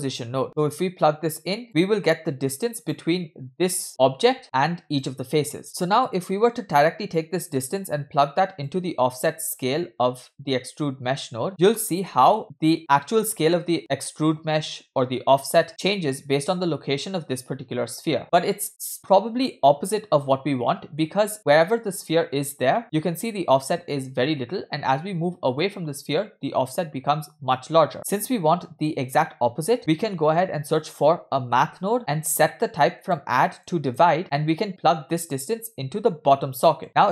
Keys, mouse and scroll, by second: 0.7-1.6 drag, 1.6 middle click, 1.6-2.3 scroll up 2, 2.3-2.8 drag, 3.6 click, 4.4 middle drag, 4.9 click, 5.9 scroll down 1, 6.0 middle click, 7.6-8.7 drag, 10.3-11.5 drag, 11.5 scroll down 2, 11.5-12.1 middle drag, 12.1 space, 12.8 scroll down 1, 12.9-13.8 middle drag, 15.7-18.2 scroll down 1, 18.2-18.7 scroll up 2, 18.7 space, 19.5-21.0 middle drag, 29.8 middle click, 29.8 scroll up 2, 30.0 shift+a, 32.8 click, 33.6 click, 33.9 click, 35.3-36.8 drag, 36.8-37.1 scroll up 3.